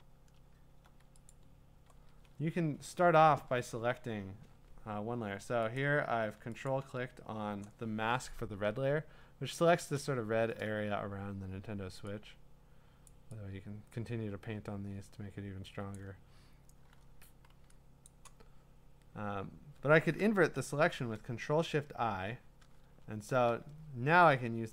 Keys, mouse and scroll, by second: 1.3 ctrl+click, 1.3 scroll, 2.3-2.9 ctrl+scroll, 2.9 scroll down 3, 5.2 scroll, 5.9 click, 6.7 ctrl+click, 13.0-14.2 drag, 15.9 click, 18.1 click, 20.5 ctrl+shift+i, 22.8-23.4 scroll, 23.4 scroll down 3, 24.3 scroll down 2.